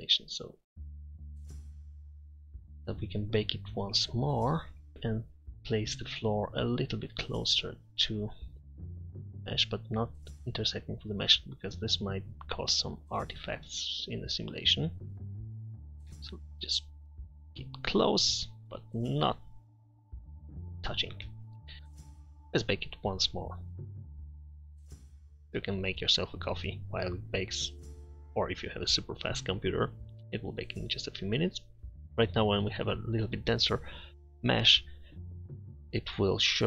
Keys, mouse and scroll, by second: 2.2-3.0 middle drag, 4.9 KP_3, 7.8-9.1 middle drag, 19.1-20.6 middle drag, 21.8 Tab, 21.8 z.